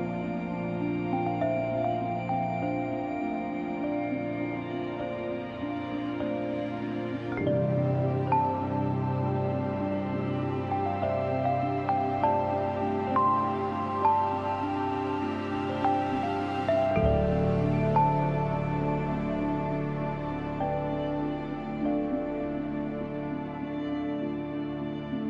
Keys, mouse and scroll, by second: 3.0-3.5 scroll down 1, 3.5 scroll up 1, 4.5-5.6 scroll down 1, 5.6-6.3 scroll up 1, 7.1 click, 7.9-8.8 scroll down 1, 8.8 scroll up 1, 12.8 click, 13.6 b, 14.0 scroll up 1, 16.2-19.6 drag, 19.6-20.1 typing, 19.9 scroll up 1, 20.4-22.8 drag, 22.8 [, 23.4-25.2 drag.